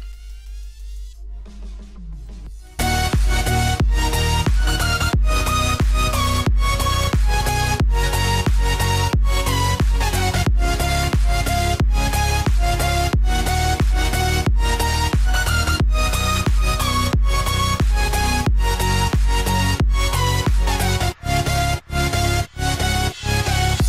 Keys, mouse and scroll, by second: 2.6 click, 5.0-5.3 typing, 5.4 Return, 5.8 click, 7.8 typing, 8.1 Return, 8.6 click, 10.9-11.3 typing, 11.9 click, 13.2-13.7 typing, 13.9 Return, 14.2 click, 15.6 alt+scroll down 1, 15.9 space, 15.9 click, 17.0 alt+shift+click, 20.1 click, 20.4-20.8 alt+scroll up 2, 20.8 space, 21.0 click, 21.1 space.